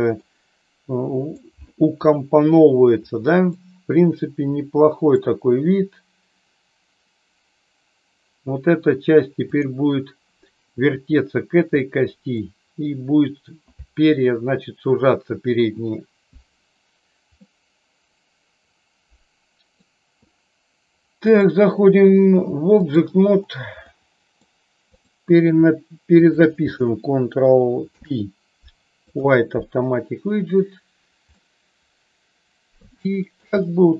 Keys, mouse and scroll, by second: 0.2-1.4 middle drag, 3.5-5.1 middle drag, 9.5 click, 11.7 middle click, 17.5-19.7 middle drag, 21.1-23.0 drag, 23.9 middle click, 25.0 click, 26.3 shift+click, 27.7 ctrl+p, 31.2-33.4 middle drag, 33.6 middle click.